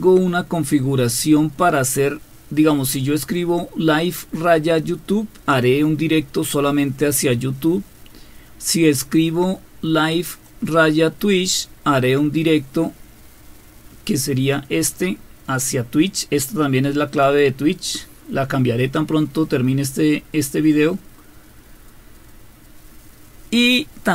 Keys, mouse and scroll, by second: 0.0-2.9 scroll up 2, 3.3-5.6 drag, 8.2-10.4 scroll down 2, 10.4-11.5 drag, 14.5-17.3 drag.